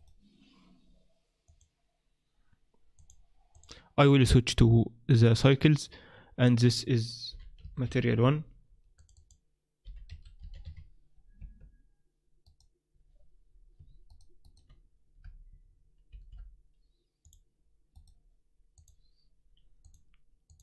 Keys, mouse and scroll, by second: 0.0 right click, 1.4 click, 2.9 click, 6.6 click, 12.4 right click, 14.1 shift+right click, 16.1 ctrl+l, 17.9 right click, 18.7 click, 20.5 click.